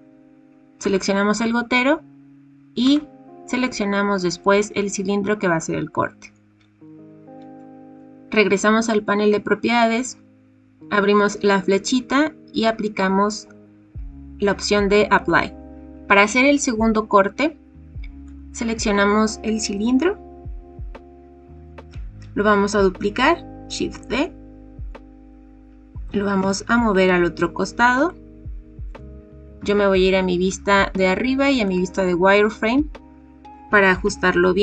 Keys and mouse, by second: 10.9-15.3 drag, 23.9 shift+d, 26.0 g, 26.3 x, 29.5 KP_7, 33.6 g, 34.0 x.